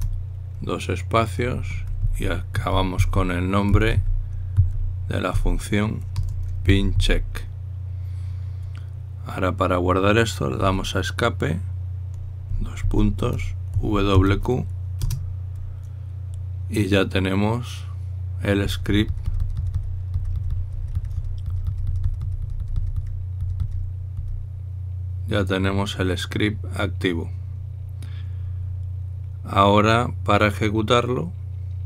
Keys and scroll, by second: 0.3 Return, 0.6 Return, 2.2-7.7 typing, 11.4 Escape, 13.5-14.9 typing, 15.8 Return.